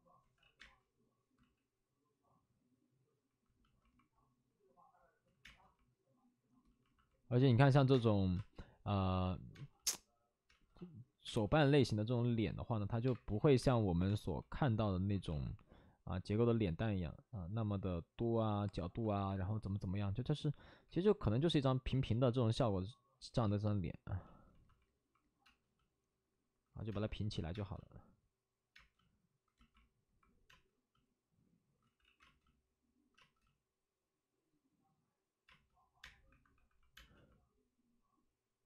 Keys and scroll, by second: 0.2 ctrl+z, 0.3 ctrl+z, 0.5 space, 1.3 ctrl+z, 5.2 ctrl+z, 5.3 space, 7.4 space, 7.8 space, 8.3 space, 13.0 1, 13.3 ctrl+z, 13.5 1, 14.0 space, 15.0 ctrl+z, 19.1 2, 21.6-23.2 typing, 25.4 space, 27.9 space, 28.6 space, 30.4 space, 31.8 ctrl+z, 32.1 ctrl+z, 32.1 space, 36.2 space, 36.2 1, 36.9 space, 36.9 1.